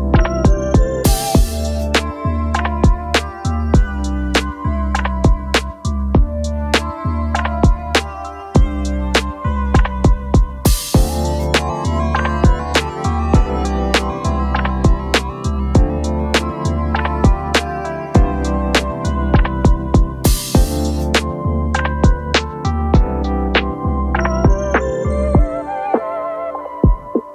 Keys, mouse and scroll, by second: 0.5 double click, 0.8-1.7 space, 10.4 double click, 15.4-16.3 alt+scroll up 4, 21.5-26.3 typing.